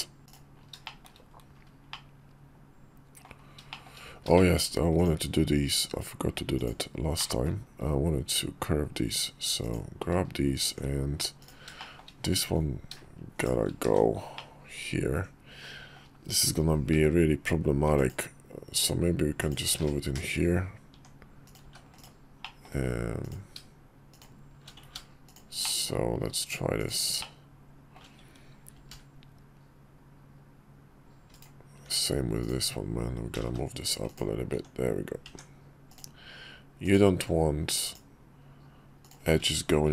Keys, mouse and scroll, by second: 0.6 shift+middle drag, 1.6-2.9 middle drag, 3.4 shift+middle click, 4.1 shift+middle drag, 4.9 Tab, 6.3 click, 6.9 middle click, 9.3 click, 10.4 Tab, 11.1 click, 11.5 shift+middle click, 13.1 shift+click, 13.6 1, 14.1-15.7 middle drag, 16.7 k, 20.6 Tab, 21.2 click, 21.4 x, 22.1 middle click, 22.9 click, 23.8 shift+click, 24.6 ctrl+z, 25.0 shift+click, 25.3 shift+middle click, 26.5 shift+click, 26.9 shift+middle click, 28.5 ctrl+b, 32.1 Tab, 32.1 click, 33.1 g, 34.2 Tab, 35.0 Tab, 35.6 click, 36.5 click, 37.6 shift+click, 38.7 shift+click, 39.7 ctrl+b.